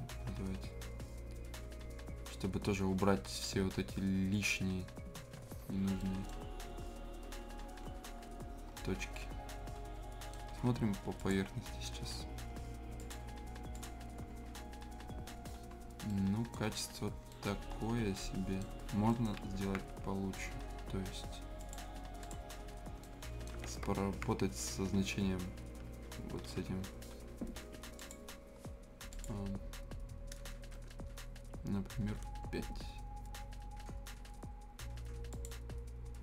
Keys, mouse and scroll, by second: 5.4 scroll down 1, 6.0 right click, 6.5 scroll up 1, 7.3 scroll, 7.6 scroll down 1, 8.3 scroll up 1, 8.7-11.1 right drag, 11.1 click, 12.1-12.6 scroll down 1, 13.0 click, 14.1 scroll down 1, 14.3 scroll up 1, 15.5 scroll down 1, 15.9 scroll up 1, 16.1 right click, 16.6 scroll down 1, 16.8 scroll up 1, 17.3-18.7 right drag, 18.7 scroll down 1, 19.1 right click, 19.7 ctrl+z, 19.9 scroll down 1, 20.5 scroll up 1, 21.6 click, 21.8 click, 22.6 scroll down 1, 23.0 scroll up 1, 23.0 right click, 23.6 ctrl+z, 24.8 scroll down 1, 25.5-25.9 scroll up 1, 26.5 ctrl+t, 28.0 click, 30.8 BackSpace, 35.3 click.